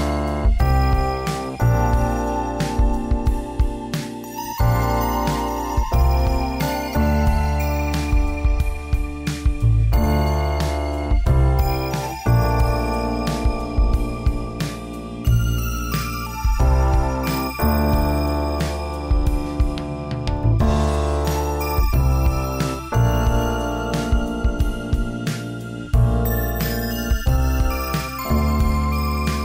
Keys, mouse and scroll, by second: 0.3 middle click, 1.3 a, 2.3 ctrl+n, 2.8 Tab, 3.6 KP_1, 4.6 shift+middle click, 6.9 click, 10.4 click, 11.0 click, 11.6 g, 13.5 click, 18.1 middle click, 18.9 z, 19.5 Tab, 20.0 right click, 20.4 e, 22.1 ctrl+z, 22.4 ctrl+z, 23.1 right click, 25.9 r, 28.6 a, 28.7 a.